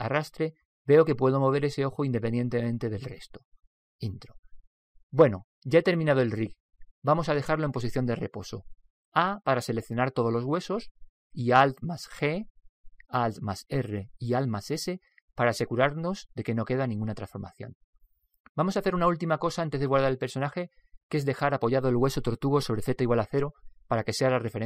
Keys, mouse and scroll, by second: 0.1 Return, 0.4 g, 5.2-8.2 middle drag, 9.2 a, 9.9 a, 10.6 a, 11.9 alt+g, 13.4 alt+g, 14.0 alt+r, 14.4 alt+r, 15.2 alt+s, 15.6 alt+s.